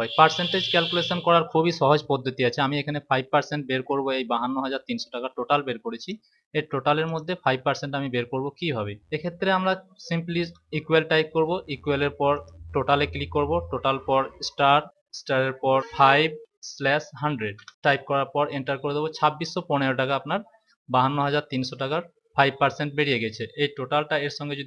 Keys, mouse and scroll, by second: 0.4 click, 5.9 click, 10.2 =, 12.3 click, 14.3 *, 15.8 5, 17.2-17.6 typing.